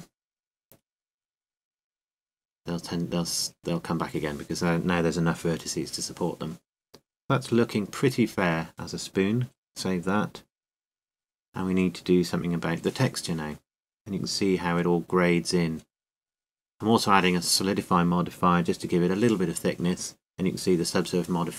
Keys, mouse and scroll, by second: 1.4-6.0 drag, 6.0 middle click, 6.9 middle click, 9.0 middle click, 9.7 click, 9.9 right click, 10.7-12.0 drag, 12.1-15.5 middle drag, 15.5 right click, 16.1-17.4 drag, 18.3 middle click.